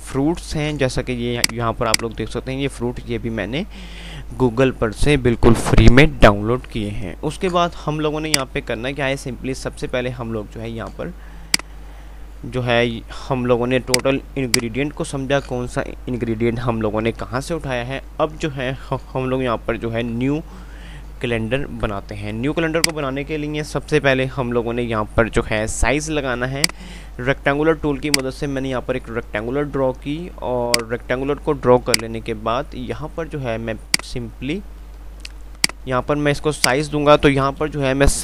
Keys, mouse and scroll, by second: 1.6 click, 6.9 F3, 8.5 click, 8.8 F3, 13.9-18.0 drag, 23.1 click, 26.8-30.9 drag, 32.2 right click, 37.7 BackSpace.